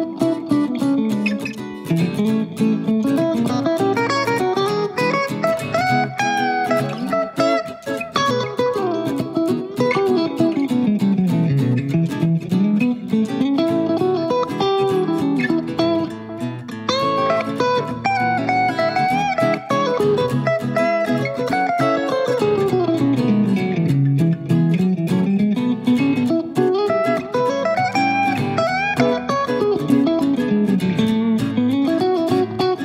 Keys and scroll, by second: 25.9 d.